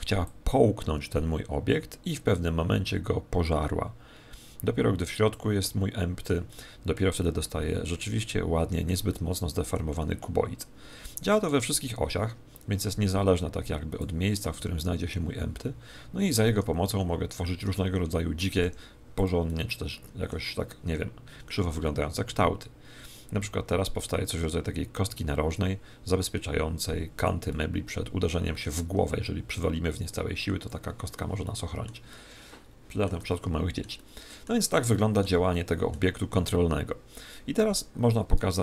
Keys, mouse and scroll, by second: 0.2 click, 5.6-11.7 middle drag, 11.4 click, 14.5 g, 17.2-19.2 middle drag, 18.6 g, 19.2 click, 20.8 g, 27.2 click, 27.4-29.3 middle drag, 29.5 click, 31.4-38.6 middle drag.